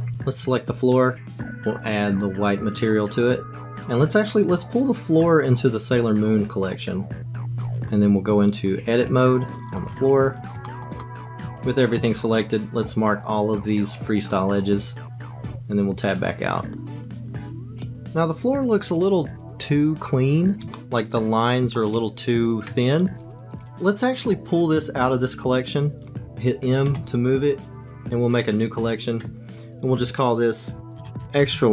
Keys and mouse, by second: 0.4 click, 1.2-3.3 drag, 7.7 click, 9.1 Tab, 11.0 shift+click, 11.4 a, 12.0 q, 15.5 Tab, 20.7-21.7 shift+drag, 25.5 click, 26.9 m.